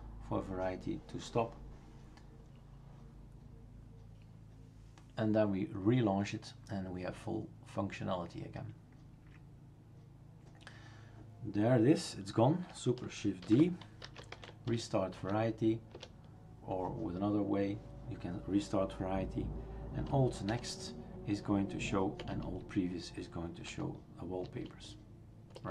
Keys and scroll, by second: 13.4 shift+super+d, 13.8-15.2 typing, 15.9 Return, 20.5 alt+n, 22.2 alt+p, 23.7 alt+n, 24.4 alt+n, 25.5 alt+p.